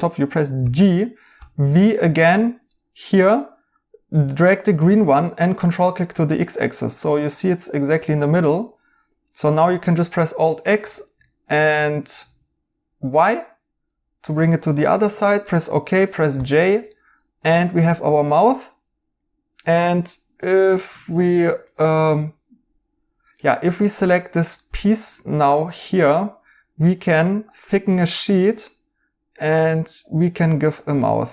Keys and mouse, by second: 0.6-1.8 typing, 8.5 right click, 10.4 alt+x, 11.2 right click, 11.4-12.2 typing, 13.3 right click, 15.1 right click, 16.3 j, 16.9 right click, 18.1 right click, 21.3 right click, 24.0 right click.